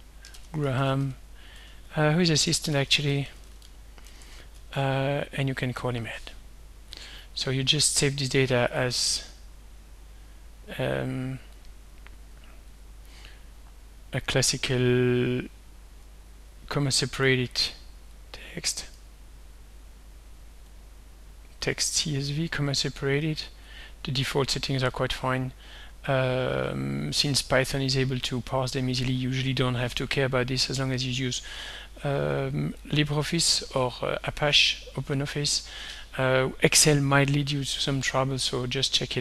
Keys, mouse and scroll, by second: 0.0-4.2 typing, 1.6 Tab, 4.2 Tab, 5.5-6.4 typing, 7.0 click, 8.4 click, 9.4 click, 11.6 click, 12.8 click, 14.2-14.9 scroll down 1, 15.7-16.7 scroll down 2, 18.2-20.8 drag, 21.7 click, 23.7 click, 24.9 click, 32.9 click, 38.6 ctrl+s.